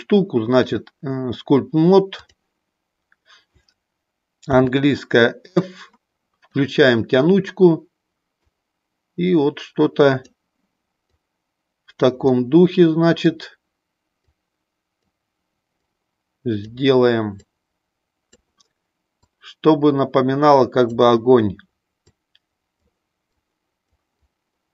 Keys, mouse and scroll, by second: 0.7-2.6 drag, 4.5 f, 8.4-10.3 drag, 11.0 click, 12.3-13.4 middle drag, 14.1 click, 15.8 click, 17.5 click, 19.3-20.9 drag, 22.1 click, 23.2 click, 24.2 click.